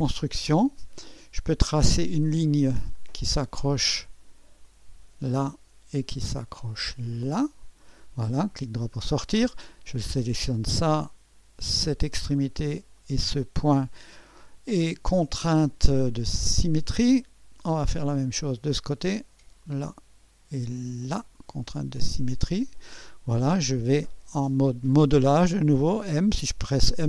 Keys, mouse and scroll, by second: 0.0 click, 2.9 click, 4.6 click, 7.1 click, 8.0 middle click, 8.3 right click, 9.7 click, 11.7-12.8 drag, 12.9 click, 13.9 click, 16.5-17.6 drag, 18.8-20.6 drag, 21.0-23.5 drag, 26.9-27.0 drag.